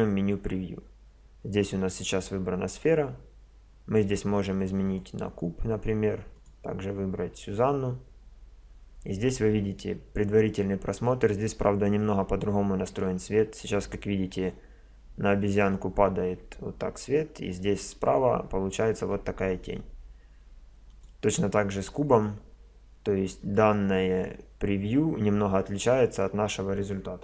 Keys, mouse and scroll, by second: 4.8-8.1 drag, 20.9-22.7 drag.